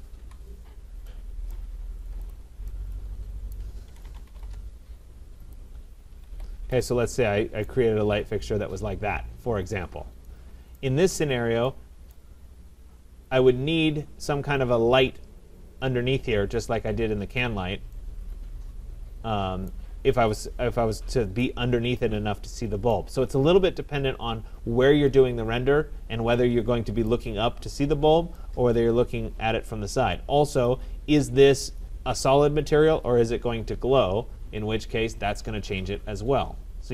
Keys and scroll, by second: 0.2 Delete, 4.6 Return, 6.1 Escape.